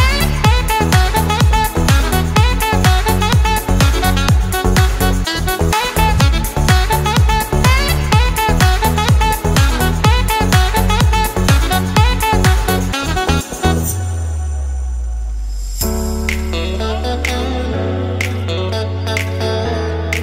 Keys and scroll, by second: 2.0 ctrl+z, 5.3 ctrl+-, 8.9 ctrl+0, 11.1 Down, 12.1 Up, 16.3 Delete, 17.8 Up, 18.6 Left.